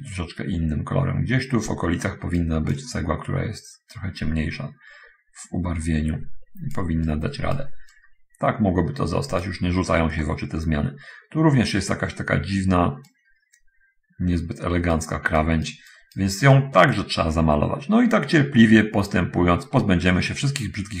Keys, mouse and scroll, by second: 0.3-2.6 right drag, 2.8-7.0 drag, 7.0-8.0 right drag, 8.2-9.8 right drag, 10.0-11.2 middle drag, 13.0-15.4 right drag, 15.7-16.4 right drag, 16.8-21.0 right drag.